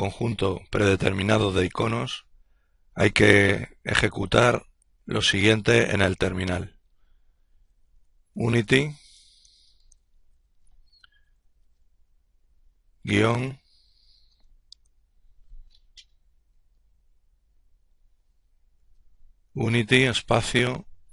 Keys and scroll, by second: 4.4-7.8 typing, 9.9 typing, 11.3 typing, 18.9-21.1 typing.